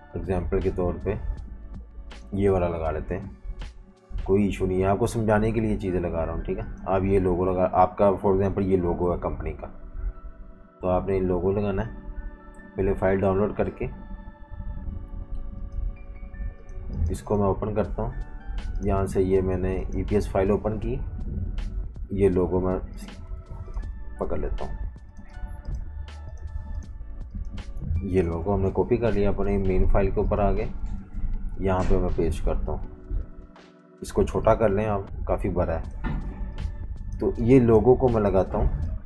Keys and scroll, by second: 22.2 v, 24.2 v, 28.0 super+z, 28.4 super+c, 31.5 super+v, 34.0 v, 36.3-37.9 typing.